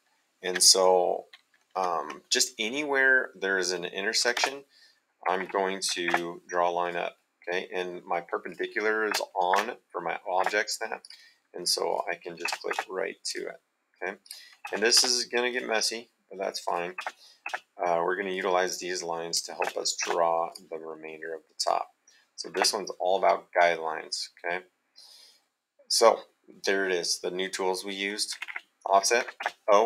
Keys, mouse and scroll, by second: 3.6 middle click, 4.4 space, 5.2 Escape, 6.1 space, 6.8 click, 8.4 click, 9.5 space, 11.0 click, 12.4 space, 13.2 click, 14.6 space, 15.5 click, 16.7 click, 17.0 space, 18.3 click, 19.6 space, 20.4 click, 21.6 click, 22.5 space, 23.7 middle click, 28.3 Escape, 29.2 o, 29.4 space.